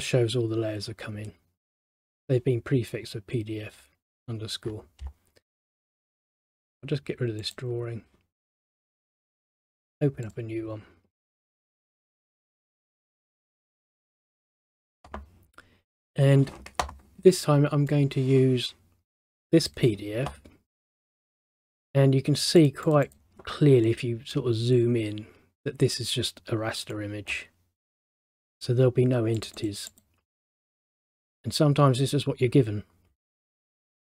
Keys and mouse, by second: 6.2 click, 13.9 click, 18.0 click, 22.7 click, 24.0 middle click, 27.1 middle click, 27.9 middle click, 29.7 click, 30.0 click.